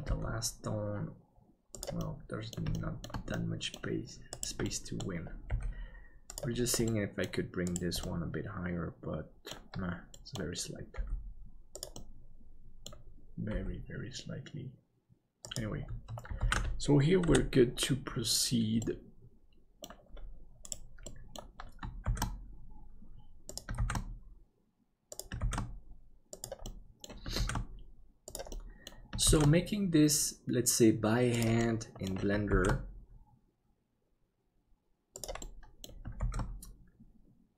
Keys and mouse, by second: 0.1 g, 2.1 middle click, 2.9 shift+middle click, 3.3 middle click, 4.6 middle click, 5.5 g, 6.9 middle click, 8.0-9.5 middle drag, 10.1 middle click, 10.9 g, 11.9 middle click, 13.5 g, 16.6 ctrl+s, 17.3 KP_7, 18.9 middle click, 21.1 middle click, 22.1 shift+d, 26.8 middle click, 28.6 middle click, 31.6 middle click, 32.5 shift+d, 35.5 middle click, 36.2 shift+d.